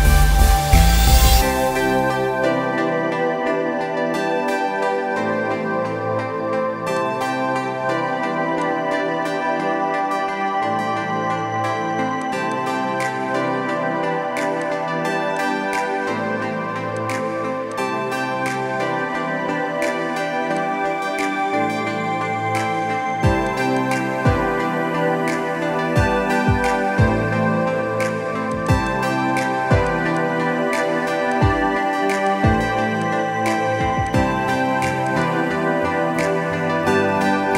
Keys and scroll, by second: 36.2 alt+Tab, 36.7 alt+Tab.